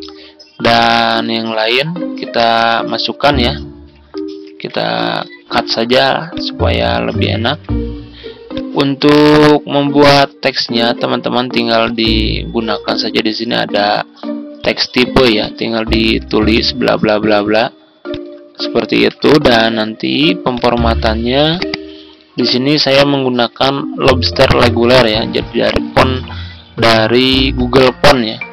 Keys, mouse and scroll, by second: 4.3 ctrl+c, 5.2 ctrl+x, 6.2 click, 7.3 ctrl+v, 8.4-15.9 drag, 15.5-16.8 typing, 16.9 ctrl+z, 18.0 click, 18.9 Delete, 20.4 click, 26.6 click.